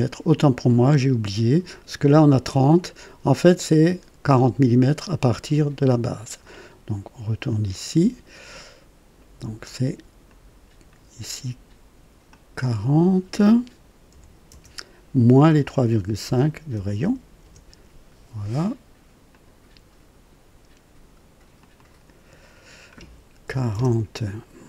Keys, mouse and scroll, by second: 7.5 click, 8.5 middle click, 10.2 click, 12.2 click, 14.0 KP_4, 14.5 KP_0, 16.2 KP_Subtract, 16.7 KP_3, 17.0 KP_5, 17.4 Return, 19.2 click, 21.5 click, 23.4 KP_4, 23.7 KP_0.